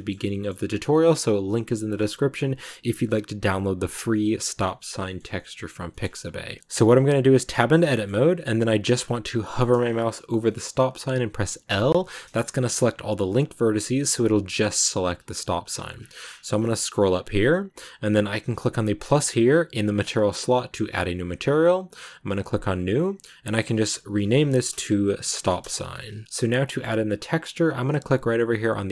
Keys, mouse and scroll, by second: 1.1-4.5 scroll up 1, 4.5 middle click, 5.1 scroll up 1, 5.2-6.8 middle drag, 6.8-7.2 scroll down 1, 7.2 Tab, 7.8 middle click, 8.1 scroll down 1, 8.2 middle click, 8.4 a, 10.3-11.6 middle drag, 11.6 l, 11.7 scroll down 1, 11.9 middle click, 12.8 g, 13.9-19.3 middle drag, 19.3-23.5 drag, 26.2-28.9 middle drag.